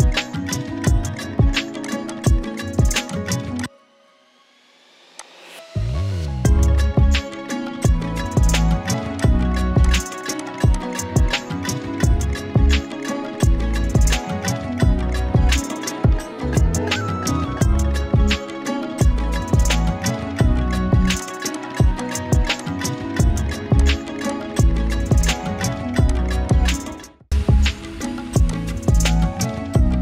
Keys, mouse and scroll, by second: 9.2 click, 17.6-18.3 scroll up 1, 20.9-22.8 typing, 21.2 click, 21.6 click, 22.0 click, 22.6 click, 22.9 click, 25.4 right click, 26.1 click, 26.3 space, 26.5-27.1 click, 26.8 space, 27.1 space, 28.0 click.